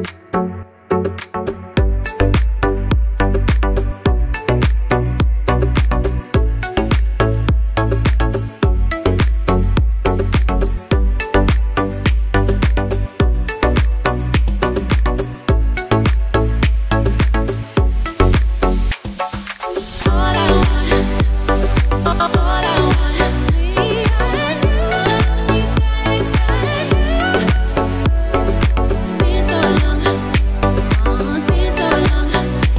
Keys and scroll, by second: 7.7 ctrl+t.